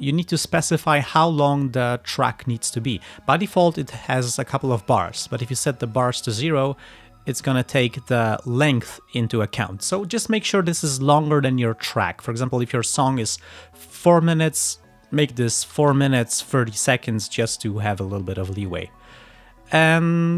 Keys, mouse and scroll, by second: 4.0-5.2 drag, 5.6 click, 8.4 click, 15.8 4, 16.0 Right, 16.2 Left, 16.9 3.